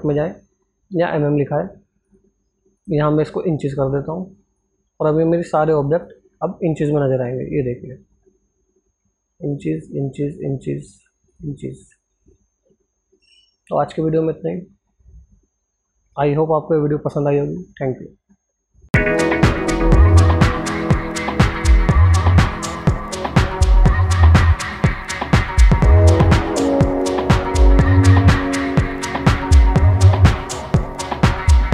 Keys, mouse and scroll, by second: 4.7 click, 9.1 click.